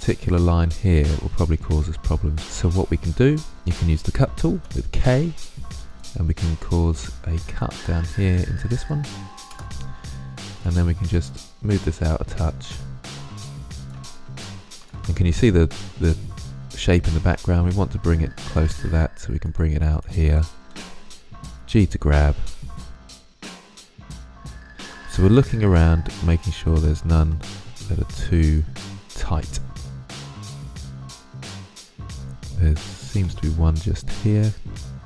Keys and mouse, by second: 4.4 k, 10.4 right click, 12.6-13.0 drag, 13.7-14.2 right drag, 15.7-17.0 drag, 20.6 g, 22.0 click, 27.5 right click, 28.4 click, 28.9 click, 29.3 middle click, 31.0-34.7 middle drag, 34.7 right click.